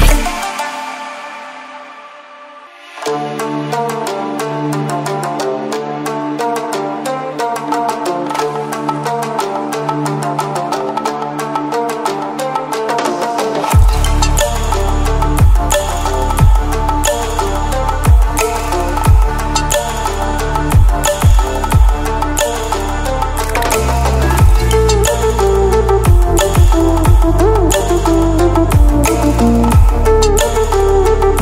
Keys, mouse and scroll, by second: 0.8 ctrl+w, 1.8 click, 2.9 ctrl+alt+scroll down 1, 4.0 click, 5.6 ctrl+alt+scroll up 1, 6.4 click, 8.7-10.8 drag, 16.4 right click, 17.6-21.7 drag, 19.7-21.6 drag, 22.2-22.7 ctrl+alt+scroll down 2, 22.7-23.8 ctrl+alt+scroll up 3, 24.2 click, 26.2 ctrl+w, 27.5 ctrl+w, 28.7 click, 30.4-31.4 scroll up 1.